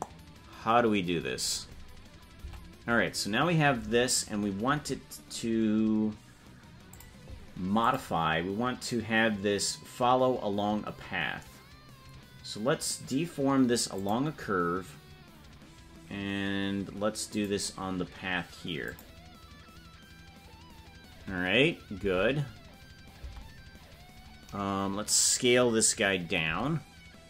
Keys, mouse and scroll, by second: 6.9 click, 7.8-14.6 drag, 17.3 click, 22.0 Tab.